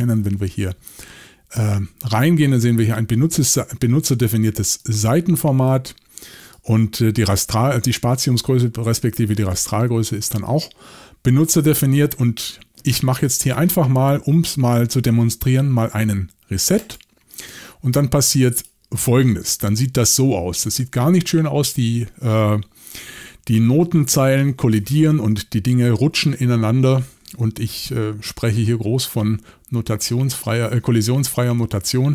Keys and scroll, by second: 0.1 shift+super+l, 25.8 typing.